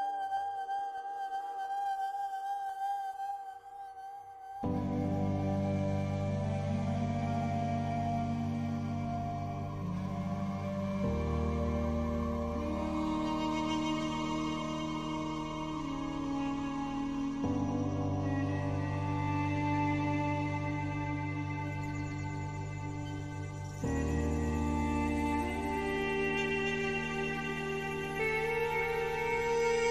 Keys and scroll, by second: 24.2 ctrl+o.